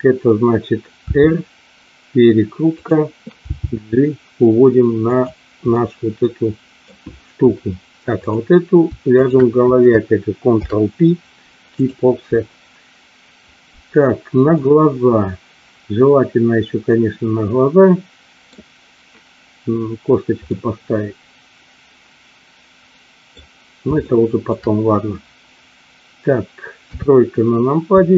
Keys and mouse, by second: 1.0 r, 2.7 click, 3.4 g, 5.0 click, 5.8-6.9 middle drag, 9.1 shift+click, 10.5 ctrl+p, 14.6-18.5 middle drag, 20.5-23.3 middle drag, 24.1 shift+middle click, 26.7 KP_3.